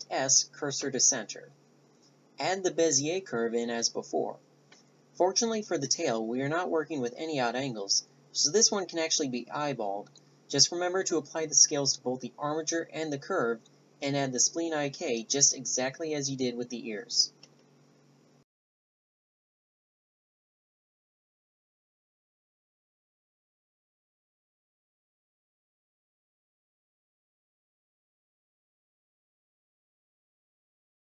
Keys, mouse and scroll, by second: 0.1 middle click, 0.7 Tab, 2.7 shift+s, 6.8 Tab, 9.4 click, 10.2-11.9 typing, 10.4 Tab, 10.8 Tab, 10.9 Tab, 11.2 right click, 11.8 Tab, 11.9 click, 12.4 Tab, 12.5 click, 12.9 middle click, 13.3 g, 14.5 Tab, 14.7-15.1 drag, 15.7 r, 16.6-19.5 right drag, 19.5 middle click, 20.3 right click, 20.4 Tab, 20.9 Tab, 22.8 click, 22.9 Tab, 23.0 Tab, 23.5 drag, 23.6 ctrl+a, 23.8 click, 24.0 ctrl+a, 25.3-25.9 drag, 26.6 click, 27.5 Tab, 27.6 Tab, 27.6 click, 28.0 click, 28.1 shift+d, 28.4 ctrl+alt+s, 28.7 click, 29.2 Tab, 29.4 click, 30.1 click, 30.5 l, 30.9 click.